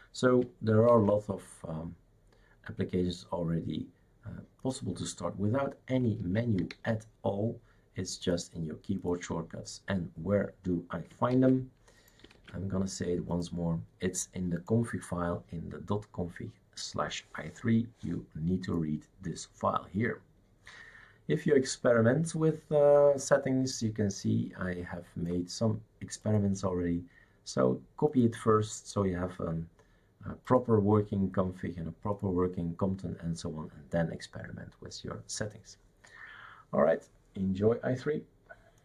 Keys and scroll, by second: 0.9 shift+super+q, 6.2 shift+super+q, 6.7 shift+super+q, 11.3 shift+super+q, 12.3 shift+super+q.